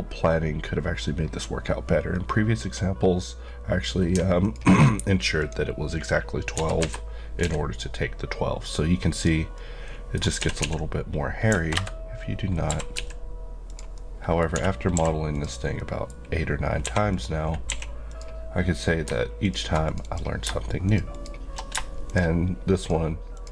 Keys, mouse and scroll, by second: 1.3-2.1 scroll, 2.2-3.1 scroll up 1, 4.4 alt+click, 6.5-7.4 typing, 9.1 click, 9.5 middle click, 10.4-11.5 typing, 11.7 KP_Enter, 12.7 typing, 13.7 click, 13.9 middle click, 14.9 typing, 15.3 click, 15.8 middle click, 16.8 2, 17.1 click, 17.7 q, 18.1 click, 19.4 click, 22.2 click.